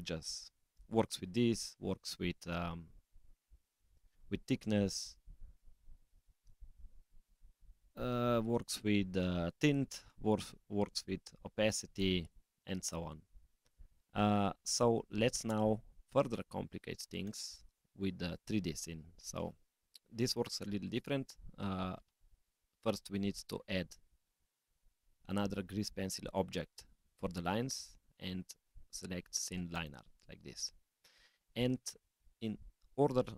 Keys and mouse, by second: 0.8 click, 1.6-13.6 drag, 17.2 click, 19.1 click, 19.3 x, 22.2 shift+a.